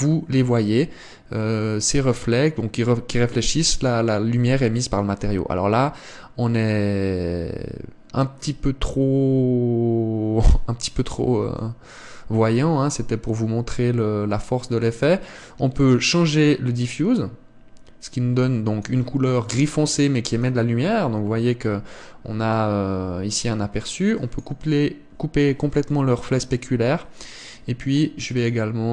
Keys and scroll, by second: 12.3 Escape.